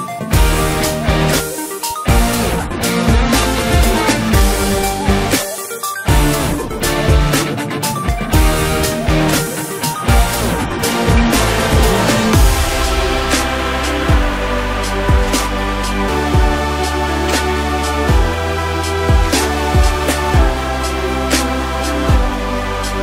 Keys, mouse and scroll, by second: 0.7-2.1 scroll down 5, 2.1 scroll down 2, 2.2-4.6 drag, 4.6-5.1 scroll up 2, 5.1 drag, 8.3 click, 8.7-9.0 scroll up 1, 9.0-9.3 scroll down 1, 9.3-10.4 middle drag, 10.4-11.0 scroll up 1, 11.0-12.4 middle drag, 12.4-13.3 scroll down 1, 13.3 drag, 15.4 click, 16.8-17.7 drag, 17.7-18.1 scroll down 4, 19.4-20.7 drag, 20.7-21.4 scroll up 1, 21.4 click.